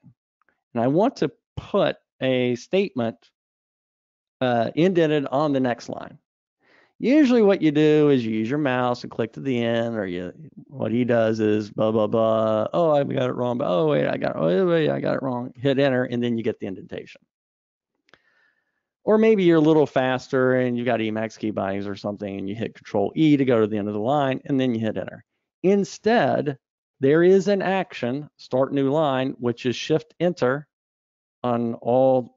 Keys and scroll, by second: 18.9 super+z, 25.7 super+z.